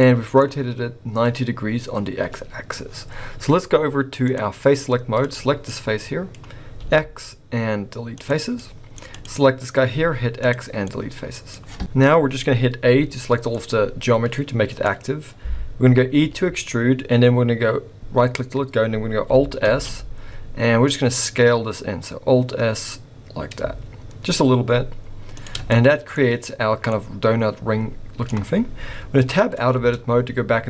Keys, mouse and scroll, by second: 0.0 middle click, 0.0 scroll up 2, 2.3-3.0 scroll down 2, 4.3 click, 5.2 click, 5.6 middle click, 6.8 x, 8.5 middle click, 9.2 click, 9.9 x, 10.8 middle click, 11.5 scroll up 1, 11.8 middle click, 12.9 a, 13.5 middle click, 14.9-15.9 scroll up 1, 16.1 e, 19.7 alt+s, 25.7 middle click, 26.9-27.2 scroll up 1, 27.2 middle click, 29.7 Tab.